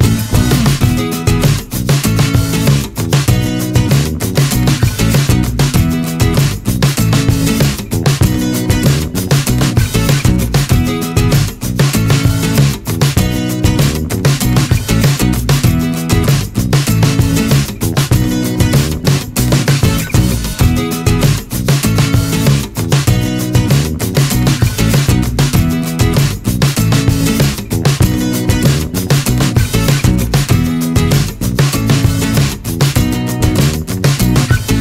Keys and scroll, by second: 1.9 3, 5.8 r, 7.7 ctrl+g, 16.1 1, 22.9 ctrl+s.